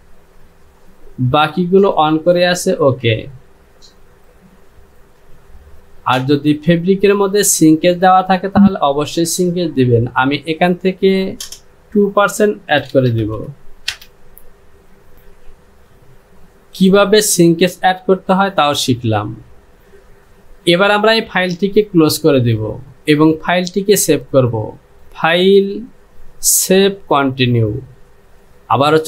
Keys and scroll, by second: 12.9 KP_1, 13.1 KP_0, 13.4 KP_2, 14.0 Return.